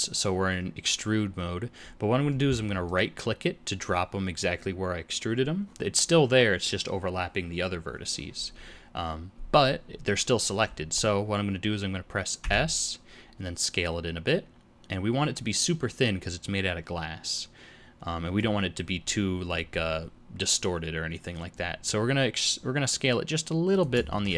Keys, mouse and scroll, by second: 12.4 s, 24.1 shift+middle click.